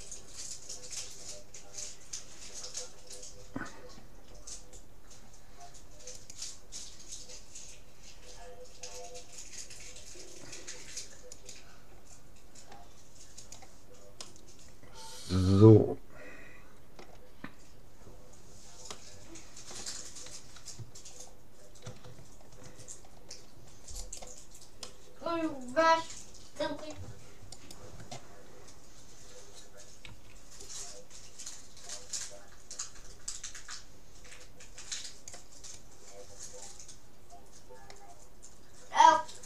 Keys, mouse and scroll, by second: 13.5-15.0 drag, 14.3-16.0 middle drag, 17.5-18.5 middle drag, 18.9-20.7 middle drag, 21.1-24.1 middle drag, 24.1 click, 24.1-25.1 right drag, 24.9 click, 25.1-26.5 middle drag, 27.5-29.3 right drag, 30.1 c.